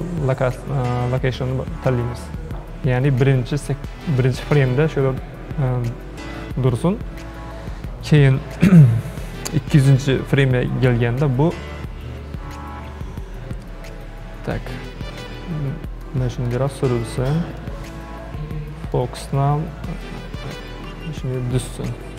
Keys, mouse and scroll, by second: 10.1-13.1 drag, 14.8-22.1 shift+middle drag.